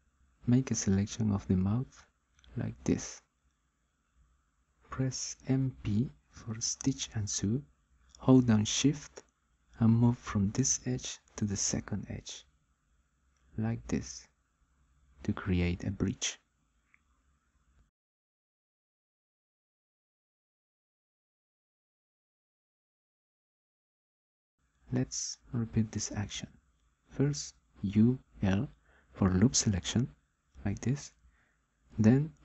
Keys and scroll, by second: 6.4 m, 7.7 p, 27.7 u, 28.1 l, 31.7 m.